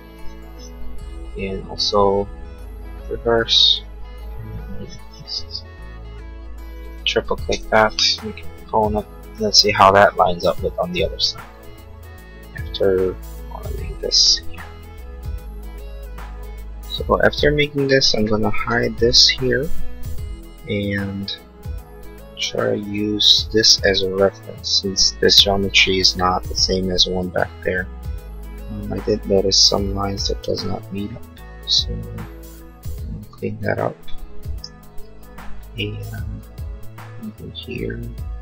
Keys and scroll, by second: 18.8 h, 20.5 l, 22.3 space, 34.6 l.